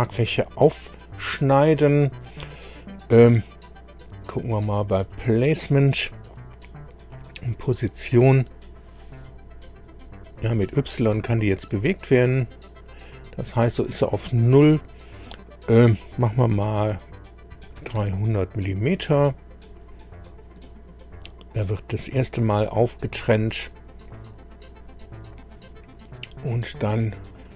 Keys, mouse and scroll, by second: 4.5 click, 7.0 click, 8.9 click, 9.7-10.1 scroll down 1, 10.2-10.7 scroll up 1, 11.1 scroll down 1, 12.4 scroll up 1, 17.3-18.5 typing, 27.3 click.